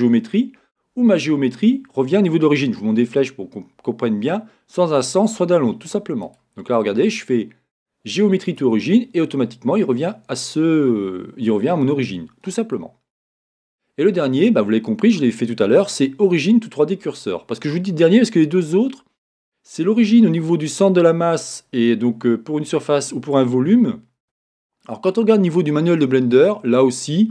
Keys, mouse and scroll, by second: 8.6-12.1 right drag, 12.1-27.3 middle drag.